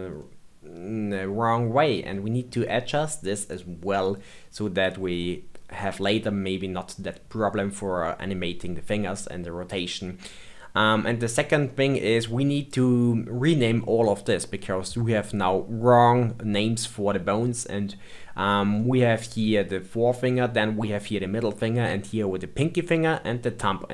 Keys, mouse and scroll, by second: 0.2-3.2 middle drag, 5.2-6.2 middle drag, 6.2-8.9 scroll down 2, 8.9 middle click, 9.8-10.6 scroll up 2, 11.2-11.7 scroll down 2, 11.7 middle click, 12.6 click, 18.7-21.7 middle drag, 23.1-23.9 middle drag.